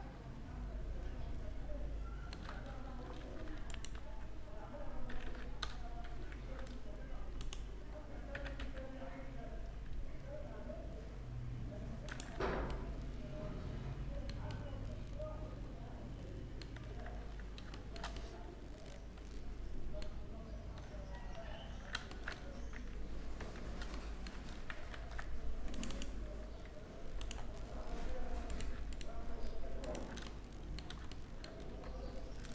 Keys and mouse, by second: 3.3-5.2 right drag, 4.7 e, 7.5-8.5 middle drag, 7.9 e, 11.9 Tab, 15.5-16.7 middle drag, 17.5 Tab, 17.5-20.0 middle drag, 21.1 Tab, 22.6-23.6 middle drag, 22.6 KP_7, 24.5 ctrl+r, 26.8-28.8 drag, 28.8-29.9 right drag, 29.9-30.3 middle drag, 30.7-31.1 middle drag, 31.1-31.7 right drag, 31.7-32.5 drag.